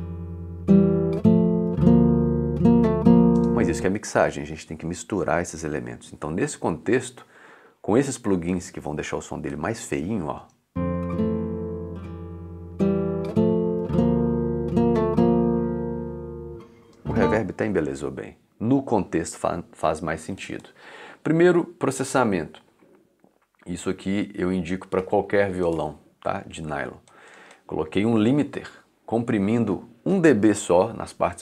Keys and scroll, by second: 3.4 space, 10.4 space, 16.8 space, 28.1 i.